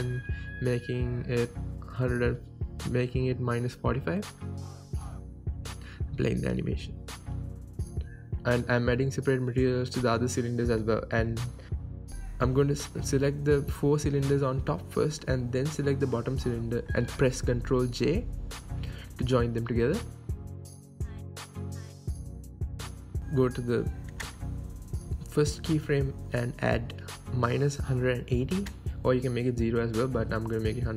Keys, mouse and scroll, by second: 3.1 KP_Enter, 3.5-9.1 right drag, 8.1 space, 9.1 middle click, 9.5 click, 9.8-11.1 shift+drag, 11.4 click, 11.7-14.4 drag, 14.9 click, 15.6-16.0 scroll down 1, 16.0-16.9 drag, 17.9 ctrl+j, 18.2-21.7 middle drag, 21.7-27.2 drag, 23.1 KP_Enter, 26.8 KP_Enter, 27.2-28.5 right drag, 28.5-30.9 drag.